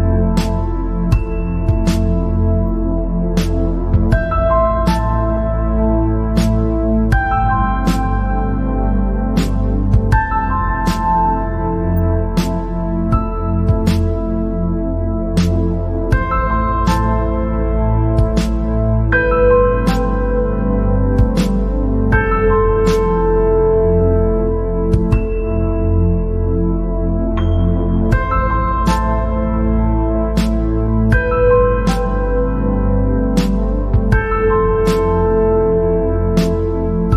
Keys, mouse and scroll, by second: 0.1 scroll down 3, 1.4 scroll up 1, 2.7 scroll up 1, 4.0 alt+click, 7.5 scroll up 1, 13.6-16.7 right drag, 16.8 scroll up 3, 17.3 scroll down 3, 19.1 click, 20.4-23.5 drag, 25.9 p, 27.8-29.0 drag, 32.0-35.1 drag.